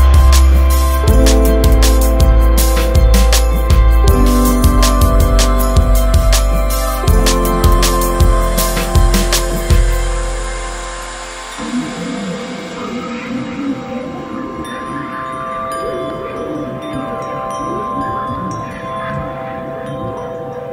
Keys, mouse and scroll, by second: 0.3 right click, 1.1 right click, 1.8 Escape, 2.2 right click, 3.3 right click, 3.6-3.9 scroll up 1, 3.9 right click, 4.4 right click, 9.0 click, 10.8 right click, 11.5 click, 13.6 Escape, 14.4 right click, 16.1 click, 16.6 right click, 17.1-18.0 scroll up 1, 18.1 click, 20.0 Escape, 20.5 scroll down 1.